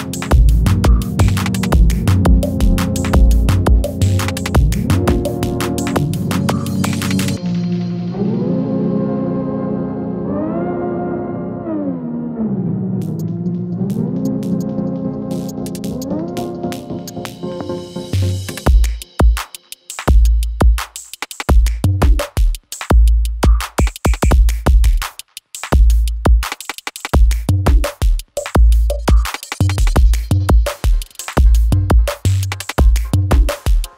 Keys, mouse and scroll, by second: 1.8 ctrl+a, 2.8 alt+], 3.6 right click, 4.7 click, 7.1 -, 8.1-9.0 drag, 9.7 alt+], 11.1-12.0 drag, 12.4 click, 12.5 scroll up 1, 12.7-13.0 scroll down 1, 13.7 click, 14.9 alt+[, 15.8-16.5 click, 16.7 [, 17.1 space, 19.3 space, 20.2 click, 24.2 ctrl+0, 27.1-32.8 drag.